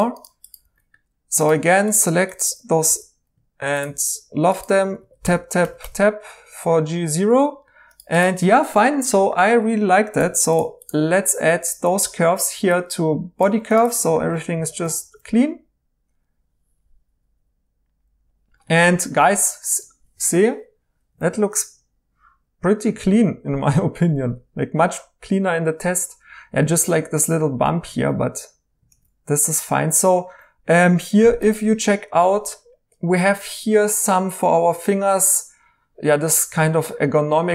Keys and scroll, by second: 0.6 2, 2.9 l, 4.8 Tab, 5.0 Tab, 5.2 Tab, 5.8 Tab, 15.0 e, 23.0 e, 27.9-28.8 typing.